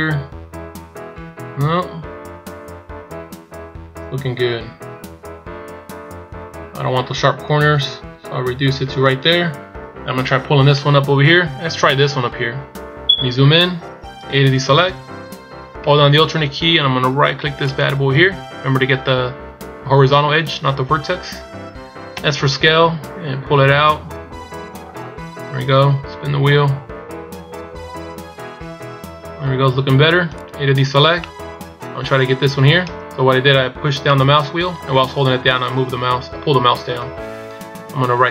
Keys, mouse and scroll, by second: 13.1 scroll up 2, 14.4 a, 17.7 alt+right click, 31.3 middle click.